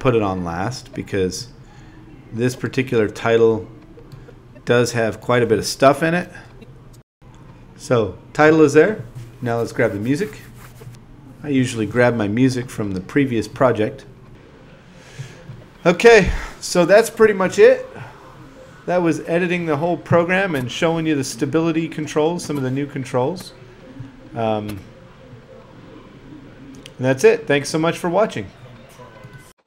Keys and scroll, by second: 0.1 Up, 3.9 Up, 8.4 super+c, 8.8 super+v, 9.0-11.1 typing, 10.1 alt+z, 10.6 Up, 12.4-19.2 typing, 18.8 super+v, 20.9 z, 21.5 super+z, 21.6 a, 21.8 ctrl+d, 22.1 z, 22.3 ctrl+d, 22.8 alt+z, 23.1 ctrl+2, 23.3 alt+z, 23.5 alt+z, 24.7 z, 25.9 super+Tab, 26.1 super+`, 26.3 super+e.